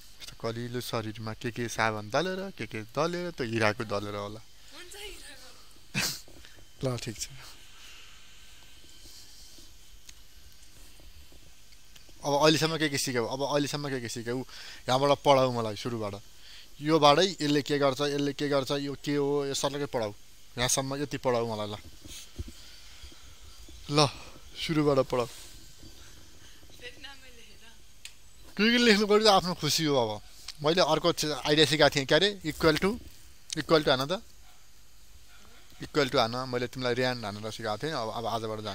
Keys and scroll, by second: 23.6 ctrl+a.